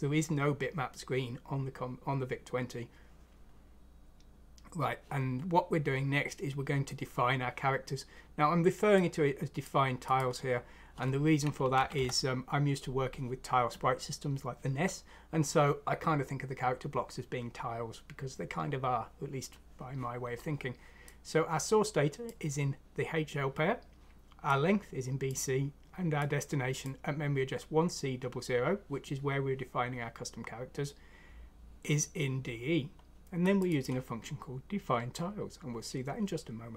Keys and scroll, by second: 11.7 Delete, 11.9 Delete.